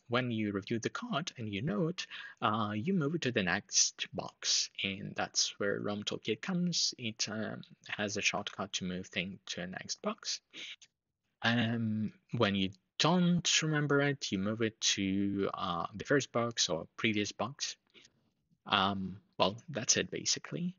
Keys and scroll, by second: 8.0 ctrl+q.